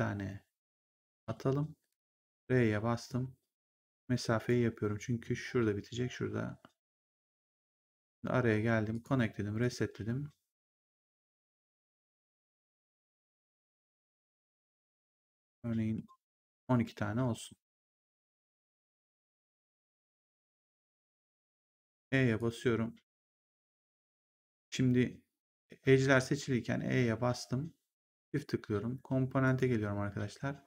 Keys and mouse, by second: 1.8 click, 2.1 r, 3.0 click, 7.1 click, 8.8 click, 10.0 middle click, 11.6 middle click, 13.2 middle click, 16.7 w, 20.8 e, 22.3 click, 24.0 ctrl+z, 27.9 click, 29.4 click.